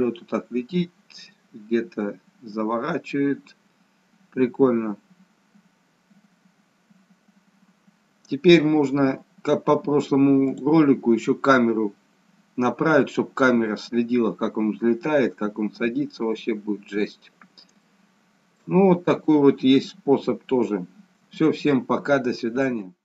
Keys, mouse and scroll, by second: 10.5 click, 16.4-17.5 scroll down 1, 17.5 scroll down 1, 17.9 shift+middle click, 20.7 scroll up 1.